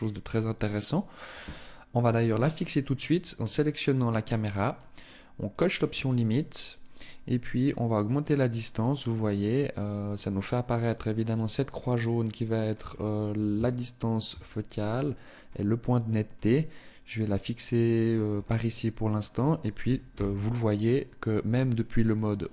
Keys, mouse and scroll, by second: 0.0 right click, 2.4 click, 7.2 click, 8.6 middle click, 11.4 middle click, 12.5-13.2 scroll up 2, 13.2 shift+middle click, 14.0 scroll up 1, 14.5 middle click, 15.8 click, 18.0 middle click, 19.6 KP_0, 20.8-21.2 scroll up 1, 21.8 click, 22.4 click.